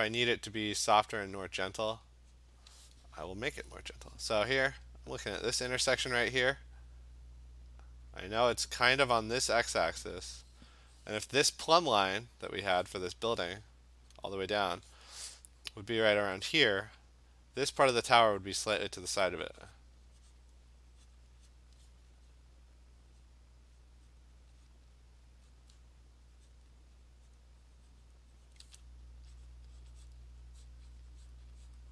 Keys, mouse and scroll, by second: 0.2 click, 0.5 click, 1.5 click, 1.9 click, 2.1 click, 2.3 click, 5.6 click, 6.0 click, 8.3 click, 9.5 click, 10.1 click, 13.7 click, 14.1 click, 17.5 click, 18.8 click, 19.3 click, 19.8 click, 20.4 click, 20.9 click, 21.1 click, 21.6 click, 21.8 click, 22.3 click, 23.3 click, 23.9 click, 24.2 click, 24.4 click, 24.7 click, 25.3 click, 25.5 click, 26.5 click, 26.8 click, 27.0 click, 27.4 click, 28.1 click, 28.5 click, 28.8 click, 29.8-31.9 drag.